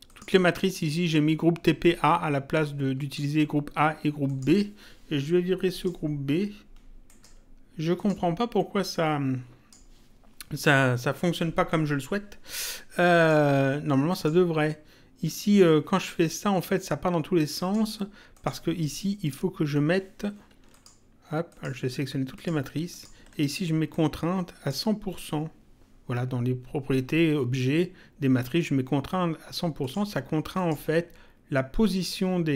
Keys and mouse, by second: 0.0 click, 2.4 click, 4.2 click, 5.6 right click, 7.0 right click, 7.9 click, 13.1 click, 17.5 click, 20.6 ctrl+click, 29.7 click.